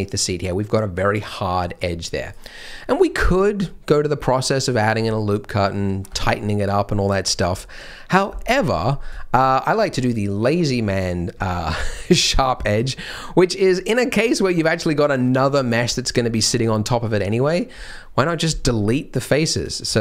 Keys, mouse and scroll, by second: 3.1 Tab, 3.1 click, 3.1 middle click, 3.1 scroll down 1, 3.3 middle click, 7.3 middle click, 9.1 shift+middle click, 12.5 middle click, 12.7 scroll, 12.9 scroll down 2, 14.2 scroll down 1, 14.2 typing, 16.1 scroll down 1, 16.4-18.0 scroll up 1, 18.7-19.2 scroll up 1, 19.5 click, 19.9 shift+click.